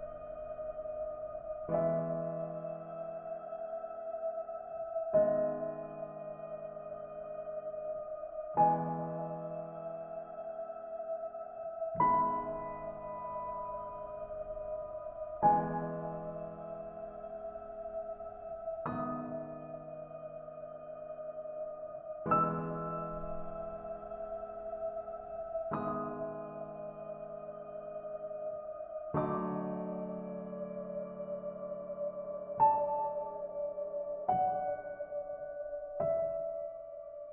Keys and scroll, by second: 15.0 ctrl+space, 25.6 ctrl+g, 36.1 ctrl+z.